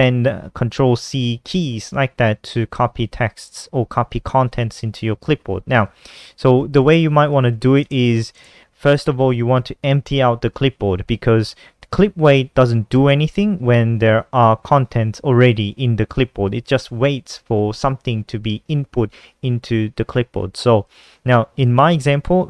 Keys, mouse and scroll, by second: 0.5 Return, 4.8 Up, 4.9 Up, 5.1-7.4 typing, 10.8 Down, 10.9 Down, 11.1 Down, 20.0 Left, 20.1 Left, 20.7 Left, 20.8 Up, 20.9 Up, 21.3 KP_Subtract, 21.7 Down, 22.3 BackSpace.